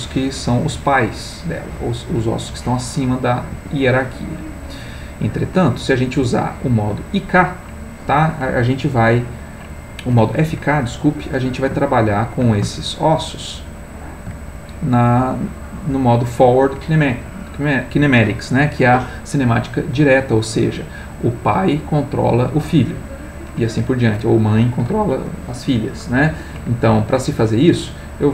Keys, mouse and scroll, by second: 3.5 Escape, 8.9 middle click, 11.9 ctrl+middle click, 12.9-14.3 ctrl+shift+middle drag.